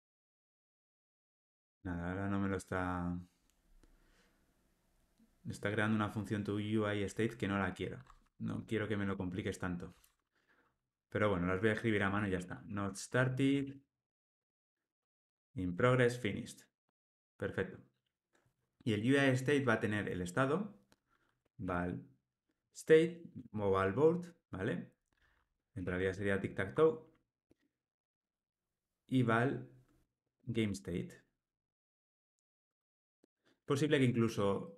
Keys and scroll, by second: 8.5 alt+], 15.7 Tab, 26.7 Tab, 32.7 Tab, 33.8 Tab, 34.2 alt+super+l.